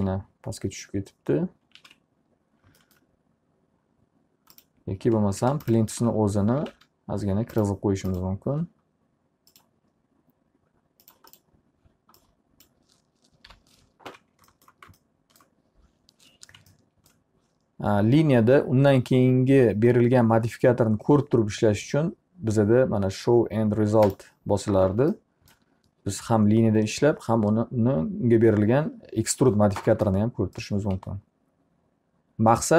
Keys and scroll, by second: 0.0 alt+q, 2.3 ctrl+z, 6.2-7.8 typing, 13.6 p, 14.6 z, 31.1 w.